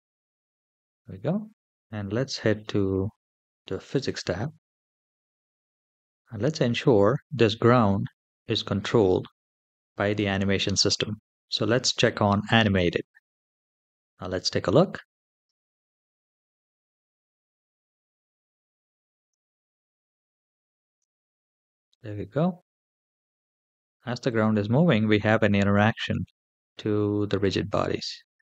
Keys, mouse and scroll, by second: 3.7 click, 4.7-6.7 scroll down 6, 11.8 click, 15.1 space, 19.5-20.8 shift+middle drag.